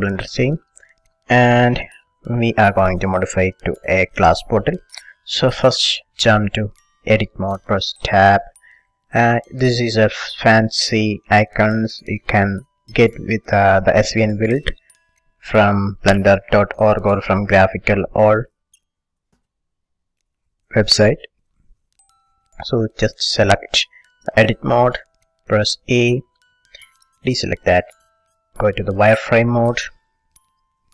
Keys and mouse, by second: 0.0 click, 0.0 t, 0.7 click, 1.1 middle click, 1.1 right click, 1.3 middle click, 1.4-8.3 middle drag, 8.3 Tab, 24.4-26.4 drag, 25.9 a, 26.4-28.1 middle drag, 28.1 z.